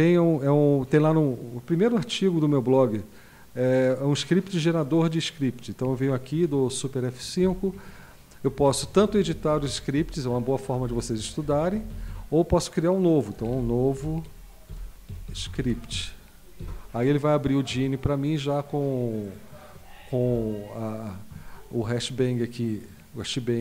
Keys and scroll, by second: 7.4 super+F5, 8.7 Down, 8.8 Down, 9.0 Down, 9.1 Down, 9.3 Down, 9.5 Down, 9.7 Down, 10.0 Up, 10.6 Up, 10.8 Up, 11.0 Up, 11.2 Down, 11.3-11.7 Down, 11.7 Up, 11.9 Up, 12.1 Up, 13.1-16.4 typing, 16.6 Return, 20.3 End.